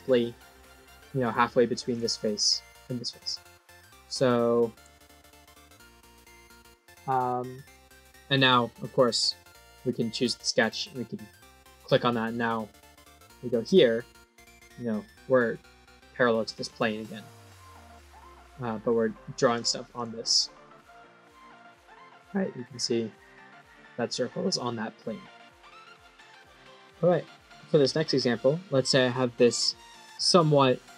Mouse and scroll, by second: 1.3 middle click, 1.8 click, 2.1 middle click, 2.7 click, 3.1 click, 3.4 middle click, 8.9 click, 9.6 click, 11.0 click, 12.8 right click, 13.5 click, 16.8-18.0 middle drag, 19.4 click, 19.8 click, 20.2 click, 20.9 right click, 21.3 click, 21.6-25.8 middle drag.